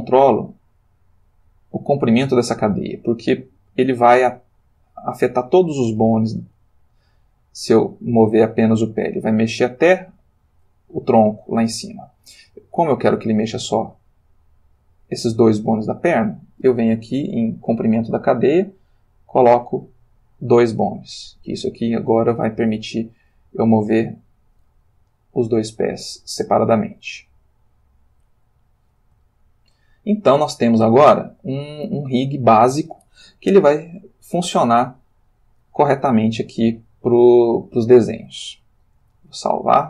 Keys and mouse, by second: 5.6 click, 6.4 g, 11.8 Escape, 15.8 click, 18.6 click, 19.5 click, 21.4 click, 22.0 g, 24.1 Escape, 25.1 click, 25.9 g, 28.3 Escape, 29.3 ctrl+middle click, 30.3-31.8 middle drag, 34.9 click, 37.4-38.5 shift+middle drag, 39.3 ctrl+s.